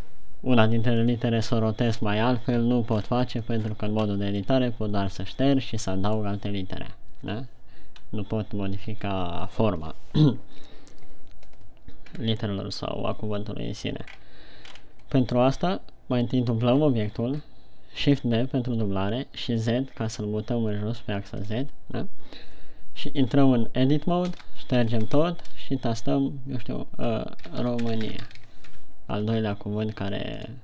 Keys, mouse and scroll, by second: 3.4-3.8 scroll up 3, 3.8 Tab, 4.0-4.5 scroll down 4, 4.5-4.9 scroll up 1, 4.9 middle click, 7.2 Tab, 7.7 KP_1, 8.3-8.7 scroll up 1, 12.6-14.1 scroll down 2, 14.5 shift+scroll down 1, 15.1 shift+scroll up 3, 17.3 shift+d, 21.9 click, 23.6 Tab, 24.9-25.2 BackSpace, 25.4 BackSpace, 25.5 BackSpace, 27.9-28.8 typing, 29.1 Tab.